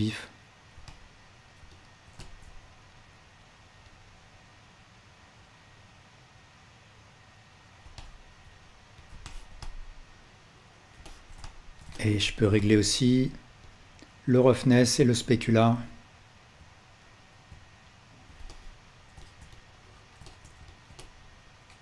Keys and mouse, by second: 1.0-3.1 alt+right drag, 9.4-12.2 ctrl+alt+middle drag.